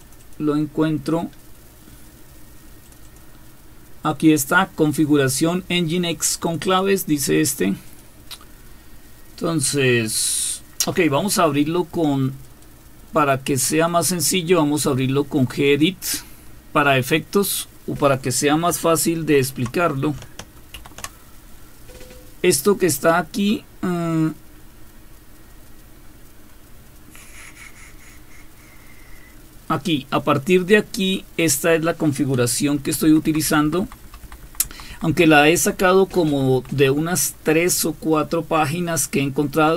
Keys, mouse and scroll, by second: 0.2 click, 3.0 click, 6.5 click, 6.7 click, 7.9 click, 15.7 click, 16.4 click, 19.2 super+space, 20.7 super+3, 26.0-27.3 scroll up 1, 27.3-27.8 scroll up 1, 27.8-30.3 scroll down 1, 31.4 click, 32.8 End, 33.0 Down, 33.3 Down, 33.4 Down, 33.6 Down, 33.8 Down, 34.0 Down, 34.2 Down, 34.4 Down, 34.6 Down, 34.9 Down, 35.1 Down, 35.7 Down, 36.3 Down, 36.5 Down, 36.7 Down, 37.0 Down.